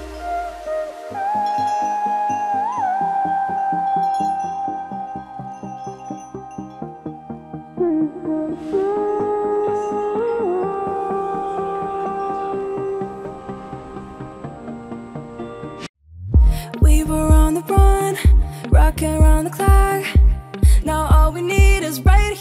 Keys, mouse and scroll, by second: 0.4-8.2 drag, 8.2 scroll down 1, 9.8 click, 12.0-16.9 drag, 17.3 click, 19.5-22.3 drag, 22.3 Up.